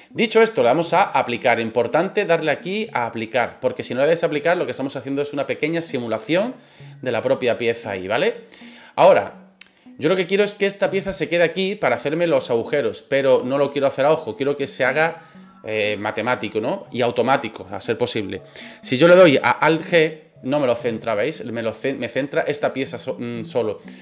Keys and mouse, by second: 2.5-3.6 drag, 8.9-9.6 middle drag, 10.6 click, 11.7 middle click, 12.3 middle click, 13.4-15.0 middle drag, 19.7 alt+g, 21.2 click, 23.0-23.7 middle drag.